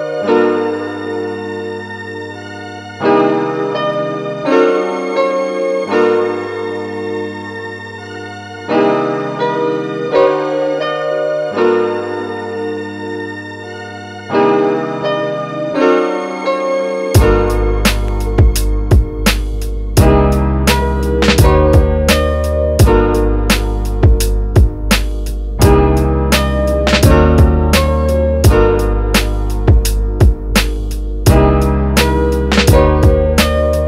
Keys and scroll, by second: 28.0 space.